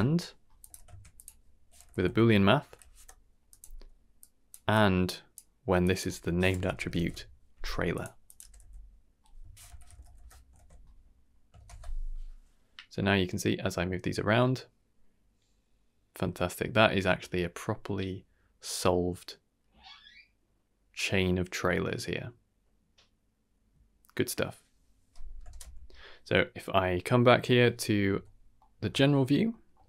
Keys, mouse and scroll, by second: 0.6 x, 0.8 shift+a, 1.9 o, 4.2 click, 4.7 click, 5.8-8.0 drag, 8.2-10.1 drag, 10.5 ctrl+s, 11.5 shift+space, 25.5 shift+space, 28.1 KP_Divide, 28.6 middle drag, 29.0 shift+middle drag, 29.5 middle drag.